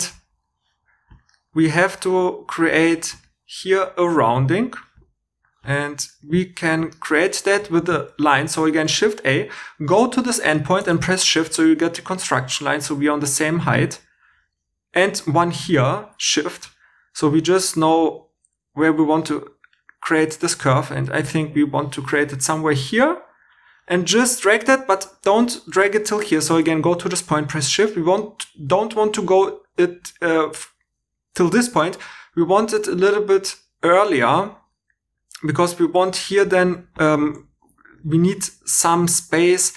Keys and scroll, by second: 7.7 shift+a, 8.4 shift+e, 36.4 1, 36.9 h, 37.5 g.